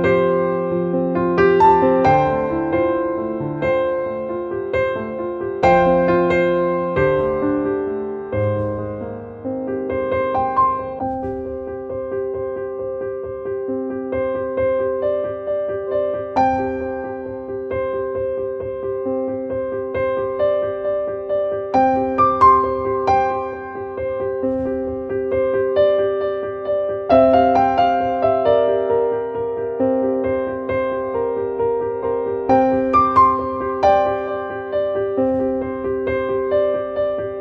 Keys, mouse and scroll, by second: 1.3 right click, 1.9-7.2 drag, 11.1-16.2 drag, 16.8-18.4 drag, 21.6 click, 23.2 click, 24.2 click, 26.4 click, 28.0-30.1 drag, 30.1-32.4 drag, 32.4-34.1 drag, 35.4-37.1 drag.